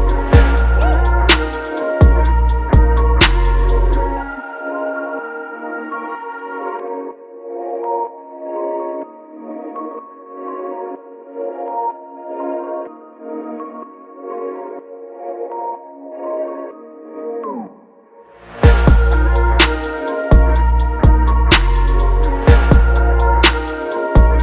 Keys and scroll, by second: 1.4 Return, 6.1 typing, 13.0 space.